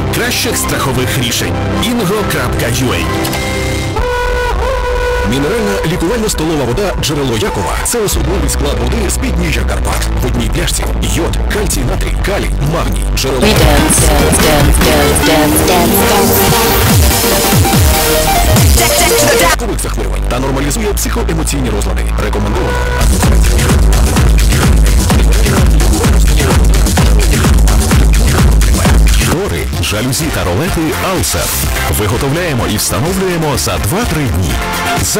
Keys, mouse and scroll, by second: 19.7 Page_Down, 29.4 Page_Down.